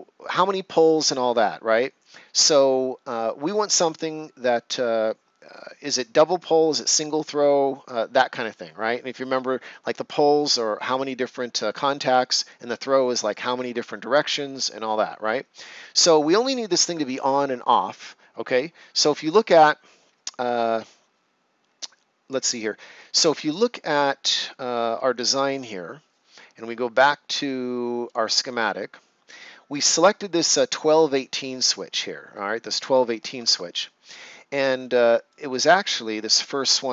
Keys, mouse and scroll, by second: 25.4 click, 28.0 click, 33.4 click, 33.5 alt+Tab, 34.7 right click, 36.1 scroll down 1.